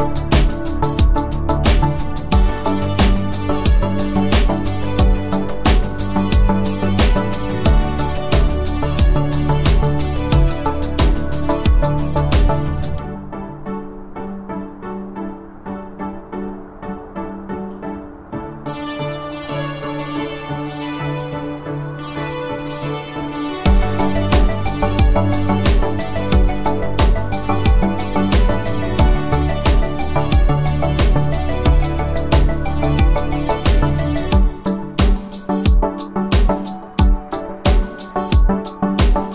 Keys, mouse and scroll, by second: 6.5 ctrl+alt+click, 15.0 ctrl+alt+click, 17.2-18.1 click, 22.3 ctrl+alt+click, 28.9-29.6 scroll up 1, 29.6 space, 29.9 click, 30.1-31.1 space, 32.0-34.8 click, 37.9 ctrl+alt+click.